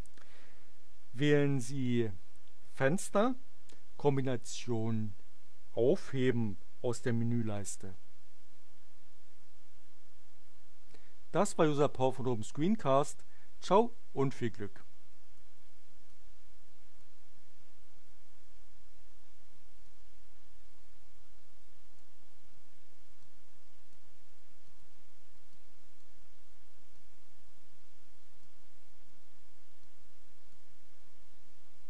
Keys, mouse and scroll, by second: 2.7 click, 7.5 click, 13.7-15.5 drag, 16.0-17.1 drag, 19.8-22.1 drag, 23.2 click, 24.3 middle click, 24.6 click, 25.5 click, 26.9-28.6 drag, 29.0 middle click, 29.8 click.